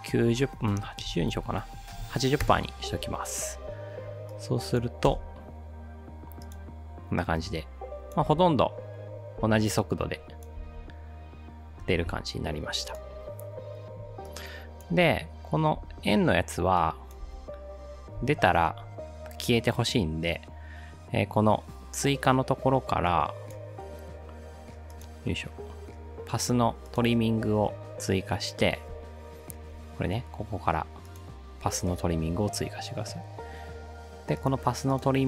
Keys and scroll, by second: 2.4 >, 3.4 Return, 3.4 0, 5.1 space, 8.3 space, 9.4 space, 10.6 space, 15.0 space, 15.8 space, 17.2 space.